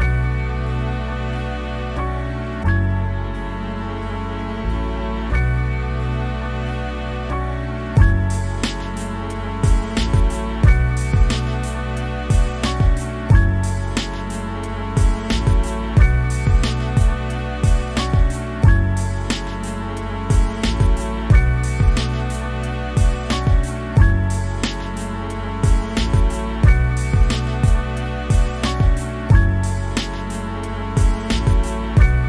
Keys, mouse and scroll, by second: 0.2 scroll up 1, 0.3 click, 0.8 scroll down 1, 1.1 middle click, 1.3 click, 1.7 scroll down 1, 1.8 click, 2.5-3.0 scroll up 2, 2.7 middle click, 3.0 click, 3.8 scroll down 1, 3.9 shift+middle click, 4.6 scroll up 1, 4.7 click, 5.5 middle click, 5.6 click, 5.9 scroll down 1, 6.0 middle click, 6.2 click, 6.5 scroll up 2, 6.7 scroll down 1, 6.9 middle click, 7.3-7.6 scroll up 1, 7.6 middle click, 7.7 click, 7.9 scroll down 2, 8.0 middle click, 8.5 click, 8.8 scroll up 2, 8.9 click, 9.2 middle click, 9.3 click, 9.8 scroll down 2, 9.9-10.9 middle drag, 10.9 scroll up 3, 11.0 shift+middle click, 11.2 click, 11.5 middle click, 11.6 click, 12.1 shift+middle click, 12.3 click, 12.7 shift+middle click, 12.8 click, 13.2 scroll down 2, 13.4 middle click, 13.5-13.9 scroll up 2, 13.7 shift+middle click, 14.0 click, 14.7 scroll down 2, 14.8 middle click, 15.1 shift+middle click, 15.4-17.5 scroll up 1, 17.5-18.5 scroll up 1, 20.3 scroll up 2, 20.4-22.1 middle drag, 22.1 click, 22.3 middle click, 22.5 f, 22.7 shift+middle click, 23.6-25.1 drag, 25.1 middle click, 25.2 click, 25.6 shift+middle click, 25.7-27.0 drag, 27.0 shift+middle click, 27.1 click, 27.9 shift+middle click, 28.0 click, 28.3 middle click, 28.4 click, 28.7 shift+middle click, 29.1 scroll up 1, 29.2 click, 29.5 scroll down 1, 29.6 middle click, 29.7 scroll up 2, 29.8 click, 30.3 scroll down 1, 30.6 click, 30.9 shift+middle click, 31.1 click, 31.3 shift+middle click, 31.5 click, 31.8 shift+middle click, 32.2 scroll up 1.